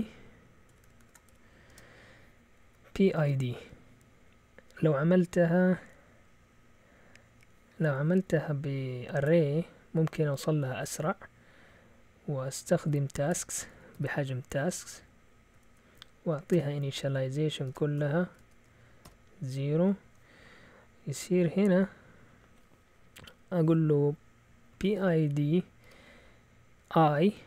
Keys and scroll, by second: 0.0-3.7 typing, 13.4-19.0 typing, 21.2-21.6 typing, 24.4-25.8 typing.